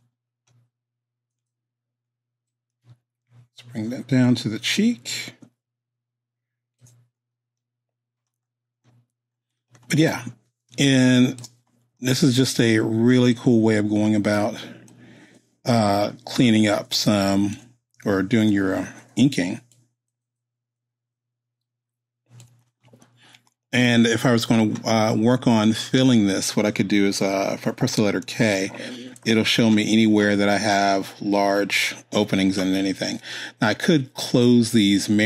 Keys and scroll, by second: 10.7 space, 28.2 k.